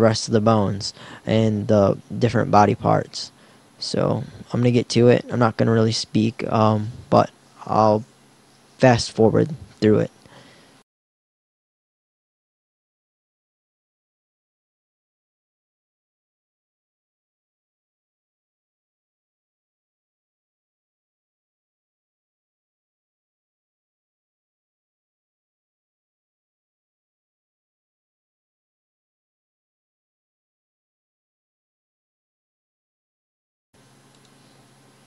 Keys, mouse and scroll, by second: 11.9 r, 12.2 r, 12.5 ctrl+p, 14.2 e, 14.4 r, 15.5 g, 16.0 alt+r, 16.1 alt+g, 16.9 r, 17.1 KP_1, 17.2 r, 17.8 Tab, 17.9 Tab, 18.6 ctrl+p, 19.7 click, 21.5 ctrl+p, 23.3 e, 23.4 r, 24.0 Tab, 24.2 Tab, 24.2 Tab, 24.8 ctrl+p, 26.2 ctrl+KP_1, 26.7 a, 26.8 a, 28.4 ctrl+p, 31.2 ctrl+p, 32.9 KP_1, 33.3 r, 33.6 r.